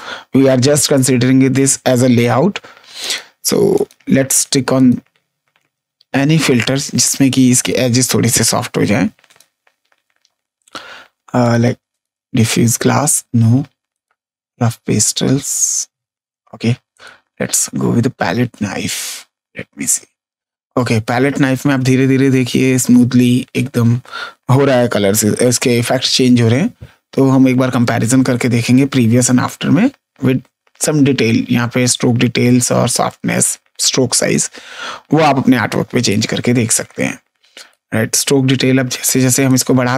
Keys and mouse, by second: 1.5 click, 2.9 click, 6.9 click, 9.2 click, 11.3 click, 13.9 click, 16.8 click, 36.0 click, 39.4 click.